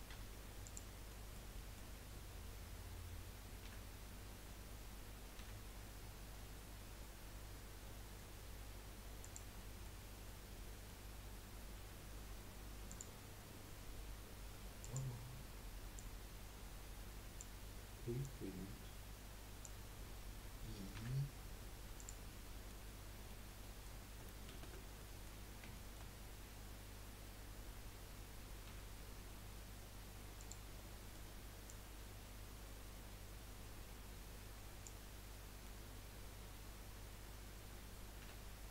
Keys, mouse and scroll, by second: 0.2 3, 0.6 click, 1.3-3.6 middle drag, 5.8 typing, 9.6-12.8 middle drag, 12.8-16.1 drag, 18.2 click, 22.2 scroll up 1, 22.4-24.5 middle drag, 24.5 ctrl+z, 25.0 middle click, 25.4 scroll up 1, 25.8-28.7 shift+middle drag, 28.7 |, 30.9 middle click, 31.6 click, 35.5-38.2 middle drag, 38.2 i.